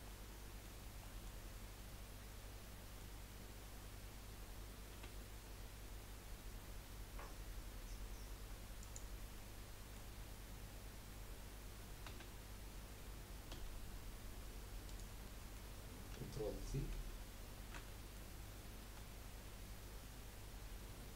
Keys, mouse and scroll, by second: 0.0-1.4 middle drag, 1.4-1.8 scroll down 2, 1.8-2.7 middle drag, 4.9 s, 9.5-12.2 middle drag, 12.2 s, 15.3-16.9 middle drag, 16.9 ctrl+z, 17.9-18.9 middle drag, 18.9 KP_1, 20.8 KP_3.